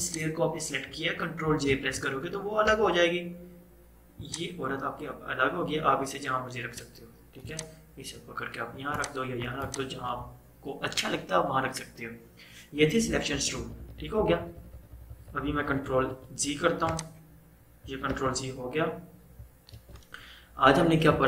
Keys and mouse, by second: 0.1 click, 1.7 ctrl+j, 2.8 v, 4.3-12.6 drag, 13.2 click, 13.4 ctrl+z, 16.9 click, 18.2 ctrl+z, 19.8 ctrl+d.